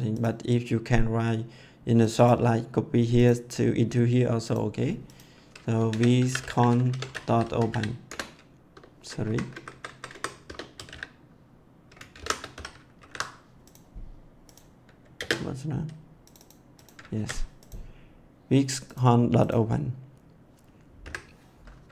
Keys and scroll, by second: 5.6-8.1 typing, 9.2 Up, 9.4 Right, 10.4-12.5 typing, 12.9 ctrl+s, 15.1 ctrl+space, 17.1 ctrl+s, 21.0 Delete.